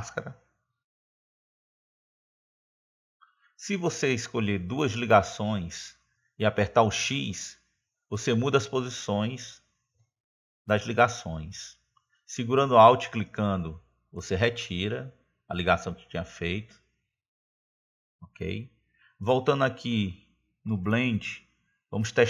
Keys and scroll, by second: 8.5 x.